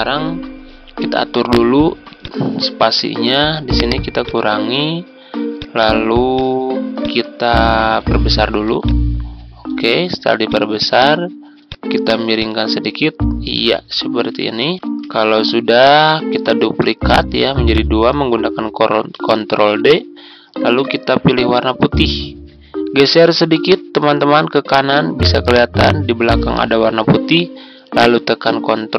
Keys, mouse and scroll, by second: 8.7 ctrl+click, 10.4-14.7 drag, 14.7 Tab, 16.6 ctrl+d, 17.6 click, 19.6 ctrl+z, 21.3 click, 23.9 Right.